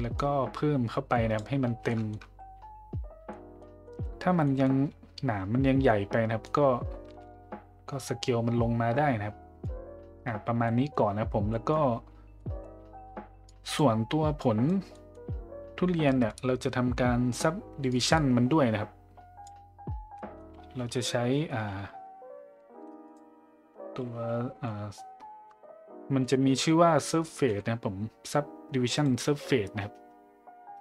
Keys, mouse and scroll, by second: 0.2-1.4 drag, 1.9 middle drag, 3.3 middle drag, 3.8 middle click, 4.4 middle click, 6.4-9.6 drag, 10.6 middle drag, 11.5 middle click, 12.4 middle click, 13.5 click, 14.4 click, 15.0 middle click, 16.0 middle click, 17.9-19.4 drag, 20.2 middle click, 22.7 shift+a.